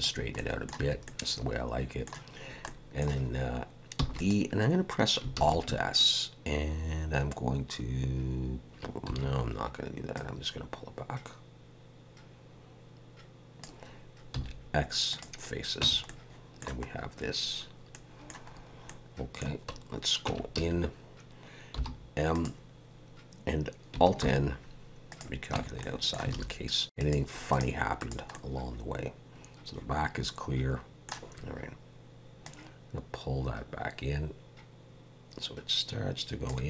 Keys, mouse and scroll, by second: 0.4 middle click, 0.8 a, 1.0 middle click, 2.6 middle click, 4.2 e, 5.3 alt+s, 10.1 click, 14.3 x, 15.8 Tab, 16.1 middle click, 16.9 scroll up 1, 17.9 middle click, 18.5-18.9 scroll up 2, 18.9 middle click, 20.3 Tab, 20.6 a, 21.8 m, 24.2 alt+n, 25.6 Tab, 25.8 middle click, 26.4 alt+a, 26.8 scroll down 1, 27.1 click, 27.5 right click, 28.3 middle click, 32.4 click.